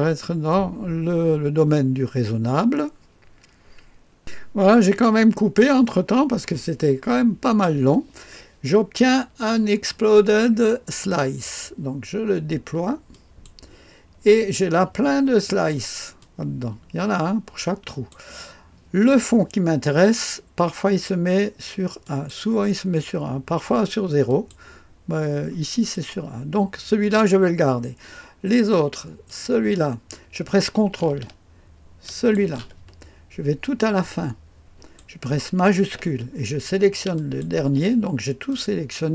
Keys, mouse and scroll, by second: 4.1 click, 13.1-14.2 drag, 13.1 middle click, 13.1 right click, 16.2-18.1 drag, 16.2-18.1 middle drag, 16.2-18.1 right drag, 22.1 click, 24.3 click, 25.8 click, 29.3 click, 32.1 ctrl+click, 34.0-35.6 drag, 37.2 shift+click, 38.5-39.1 drag.